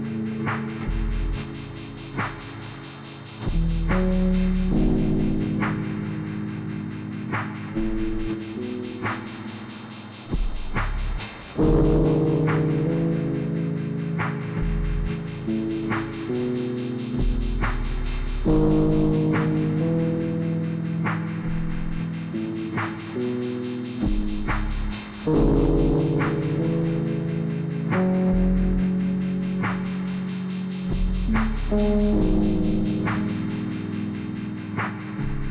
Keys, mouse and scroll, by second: 0.4-0.7 scroll up 1, 0.8 click, 1.6-4.6 drag, 4.6 ctrl+z, 5.1-6.2 drag, 6.2 ctrl+z, 6.9 click, 21.7 click, 22.6 click, 27.8 click, 28.5-29.2 scroll up 1, 29.2 click, 32.6 scroll up 1, 33.4 click, 33.9 scroll up 1, 34.4 click.